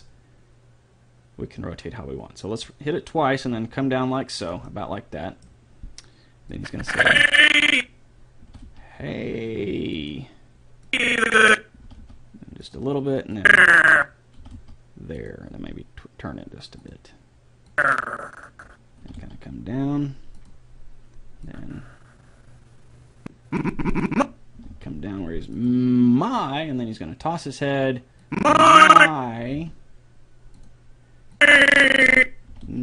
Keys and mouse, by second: 4.7-6.5 middle drag, 6.5-8.4 drag, 8.5 r, 11.0-12.7 drag, 11.9 r, 13.5-15.1 drag, 14.4 r, 15.6 r, 17.9-19.5 drag, 19.1 r, 21.6-23.2 drag, 24.5 r, 28.4-29.9 drag, 29.5 r, 31.3-32.8 drag, 32.5 r.